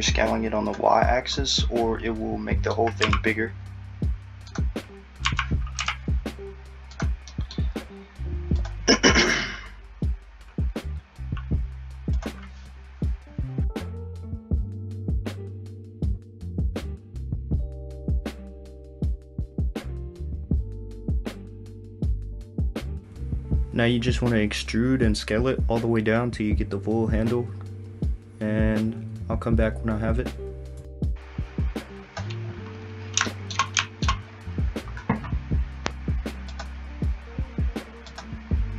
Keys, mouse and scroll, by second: 0.1 click, 1.4 middle click, 3.1 s, 5.3 s, 7.3 middle click, 8.6 click, 12.2 click, 14.7 alt+click, 19.3 click, 19.8 middle click, 20.5 click, 20.9 middle click, 22.2 click, 22.7 alt+z, 23.2 click, 23.6 alt+z, 24.4 click, 25.9 e, 27.9 click, 36.6 click.